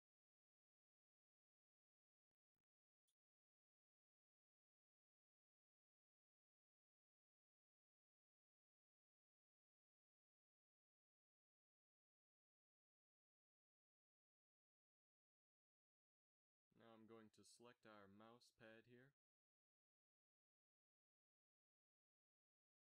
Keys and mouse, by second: 1.4 z, 1.6 z, 2.3 KP_Divide, 3.0 shift+z, 8.9 z, 9.2 z, 10.2-14.7 middle drag, 14.8-17.8 drag, 15.0 Tab, 16.7 ctrl+KP_Add, 17.8 KP_7, 18.1 z, 19.6 KP_Divide.